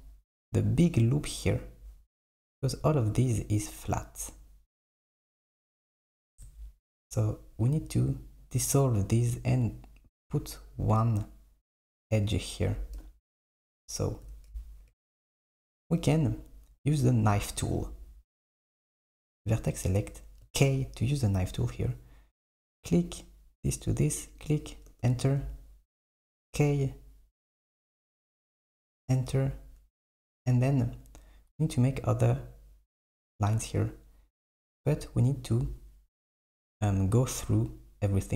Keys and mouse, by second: 13.0 KP_7, 19.2-20.5 drag, 20.5 k, 26.2 k, 35.2 middle click.